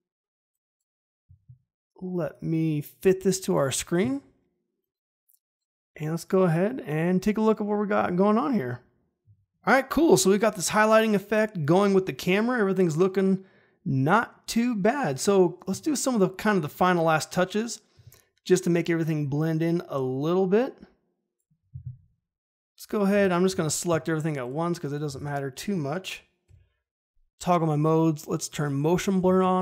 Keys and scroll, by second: 23.5 ctrl+a, 25.1 ctrl+a, 26.4 F4.